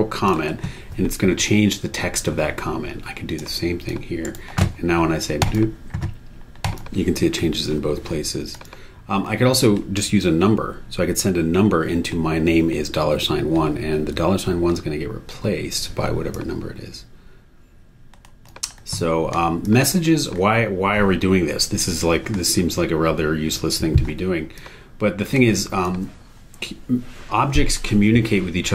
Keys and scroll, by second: 4.2 super+e.